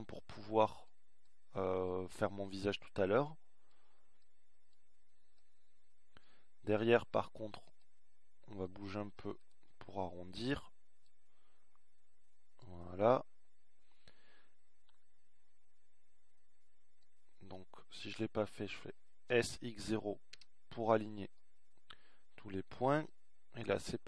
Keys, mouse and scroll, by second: 7.9 click, 10.4-11.9 drag, 12.1-13.6 middle drag, 15.3 middle click, 19.0-20.4 drag, 20.4 s.